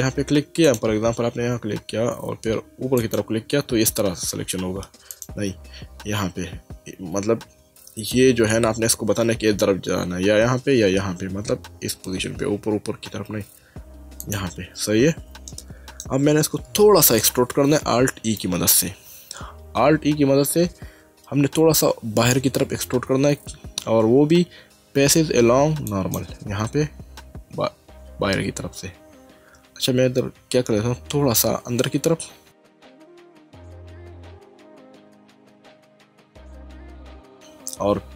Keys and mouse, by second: 0.6 click, 3.0 alt+click, 5.1 click, 14.2 alt+click, 15.5 middle click, 18.1 alt+e, 25.9 click, 35.9 click.